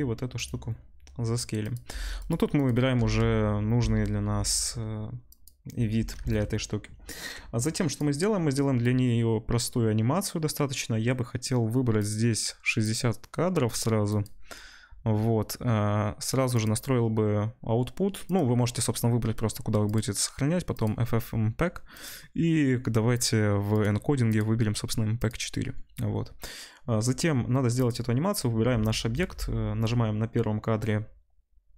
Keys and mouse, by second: 1.6 click, 1.7 middle click, 1.9 g, 2.5 click, 2.6-7.6 middle drag, 2.9 g, 6.3 ctrl+s, 7.6-12.1 drag, 12.1-12.8 middle drag, 12.8-27.8 drag, 27.8-31.7 middle drag.